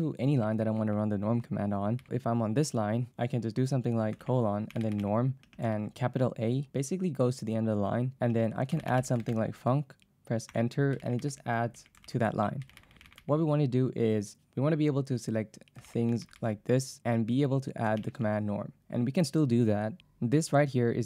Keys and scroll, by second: 0.0-2.6 typing, 4.2-5.7 typing, 8.3-9.9 typing, 10.5 Return, 12.7-13.8 typing, 15.6-16.5 typing, 18.0 shift+;.